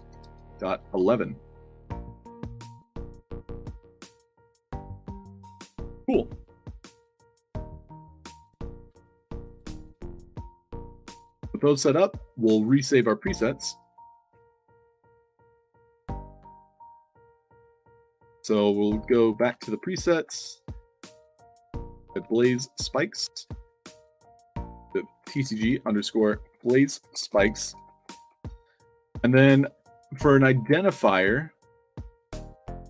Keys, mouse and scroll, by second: 0.0-0.9 typing, 2.0 click, 2.7-3.7 alt+drag, 3.9 d, 4.3 w, 8.9-9.3 alt+drag, 9.6-11.6 typing, 13.3 click, 14.3 middle click, 14.8 click, 15.0 ctrl+c, 15.2 click, 17.6 click, 18.6 click, 19.3 ctrl+c, 20.0 click, 20.2 ctrl+v, 22.0 a, 22.3 z, 23.4 click, 24.1 click, 24.4 click, 25.3 shift+c, 26.4-28.7 typing.